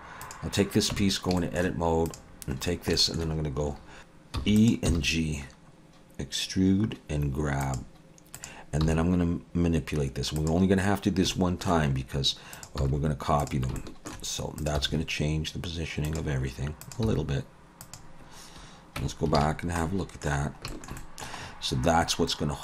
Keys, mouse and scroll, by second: 0.2 click, 0.9 Tab, 1.4 shift+middle click, 2.1 click, 2.6 scroll down 2, 2.9 shift+middle click, 3.8 scroll up 2, 4.0 g, 4.4 e, 4.9 g, 8.4 click, 8.8 g, 10.7-11.3 scroll down 1, 11.3 scroll down 2, 11.3 shift+middle click, 11.9-12.5 scroll up 1, 12.5 click, 12.5 scroll up 1, 12.8 g, 13.8 shift+middle click, 14.6 click, 14.8 g, 16.8 click, 17.0 g, 19.0 Tab, 19.4 alt+a, 19.5 scroll down 3, 19.8 middle click, 20.4 scroll down 1, 20.7 shift+middle click, 21.0 middle click, 21.4-22.3 scroll up 6, 22.3 middle click.